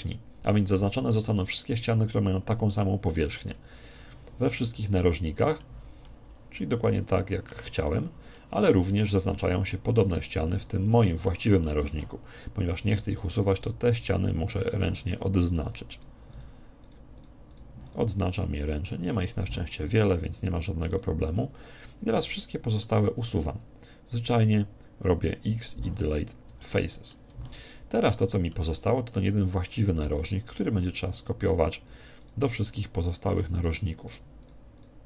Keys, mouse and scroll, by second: 3.3-7.8 middle drag, 9.8 middle click, 10.5-13.6 middle drag, 13.6-22.7 right drag, 21.5-23.9 middle drag, 26.6-29.2 middle drag, 29.6-35.0 right drag, 30.7-32.6 middle drag.